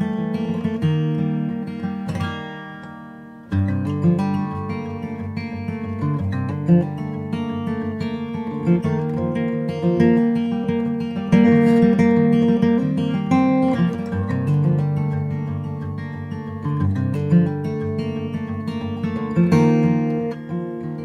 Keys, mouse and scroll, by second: 0.1 middle click, 0.4 i, 1.3 i, 3.1 click, 4.0 s, 5.4 KP_0, 8.1 ctrl+z, 9.0 click, 9.9 |, 12.9-14.6 middle drag, 13.4 click, 14.6 s, 16.7 click, 17.8 ctrl+z, 18.0 click, 18.5 s, 19.3 s, 20.3-21.0 drag, 20.8 right click.